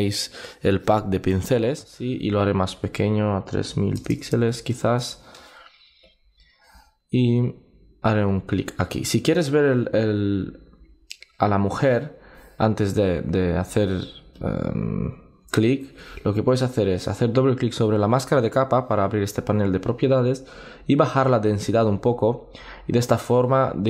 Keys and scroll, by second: 9.5 super+z, 15.5 super+z.